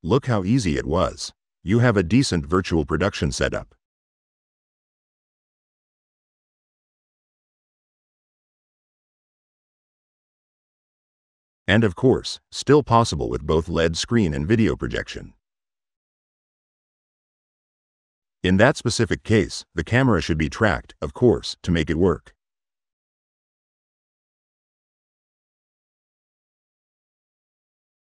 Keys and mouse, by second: 1.7 middle click, 2.6-3.9 drag, 4.1-4.8 middle drag, 4.9-10.0 drag, 12.4 click, 13.1-17.3 drag, 18.2 click, 19.3 middle click, 20.3-21.6 drag, 22.0-23.4 middle drag, 23.7-24.4 drag, 24.6-25.7 middle drag, 26.0 click, 26.6-28.0 middle drag.